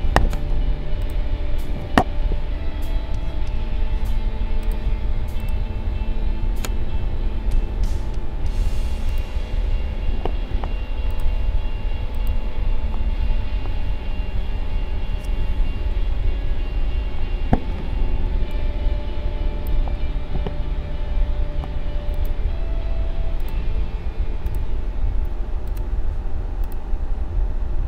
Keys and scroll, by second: 10.5 a, 16.3 ctrl+=, 18.2 space.